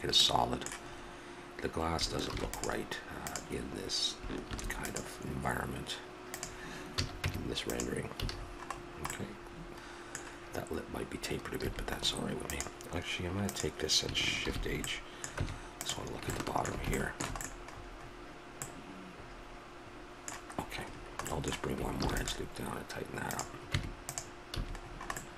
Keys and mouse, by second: 2.3 ctrl+r, 6.9 a, 7.2 Tab, 8.2 a, 11.6 a, 12.5-14.4 drag, 14.4 shift+h, 15.3 Tab, 22.0 ctrl+r, 23.7 Tab, 24.5 a.